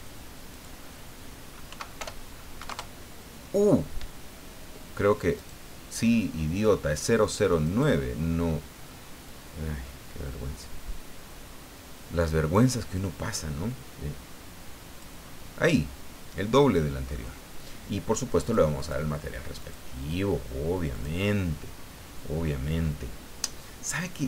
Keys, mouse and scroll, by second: 0.5 click, 1.7 End, 2.0 BackSpace, 2.7 KP_Enter, 5.4 right click, 7.6 right click, 9.2-15.2 drag, 15.9-17.3 middle drag, 18.4 click, 18.8 click, 19.6 click, 20.9 click, 22.3 scroll down 1, 22.8 scroll up 2.